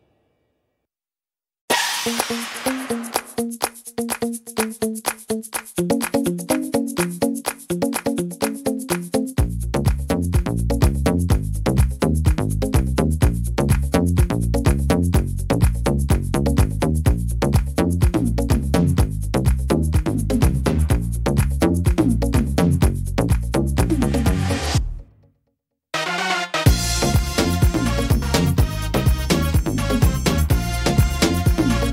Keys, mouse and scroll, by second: 1.2 scroll down 2, 2.1 click, 3.2 click, 6.1 right click, 7.2 click, 9.7 ctrl+z, 10.7 right click, 11.5 click, 13.1 ctrl+z, 13.4 ctrl+z, 13.9 ctrl+z, 14.3 ctrl+z, 14.9-15.9 scroll up 6, 15.6 middle click, 16.1 shift+middle click, 16.7 middle click, 18.0 shift+right click, 20.3 j, 23.0 click, 24.1 click, 25.6 right click, 25.8-26.8 scroll down 6, 26.8 right click, 26.8 scroll down 1, 27.8 click, 31.0 shift+right click, 31.7 middle click.